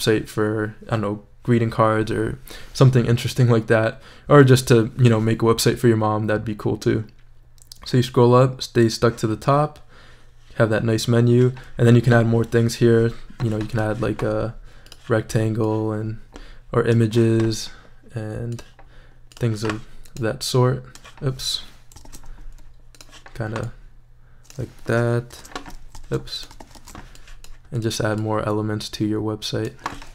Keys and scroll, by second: 22.0 shift+super+z, 25.3 shift+super+v, 26.1 shift+super+z, 26.6 shift+super+c, 26.8 shift+super+v.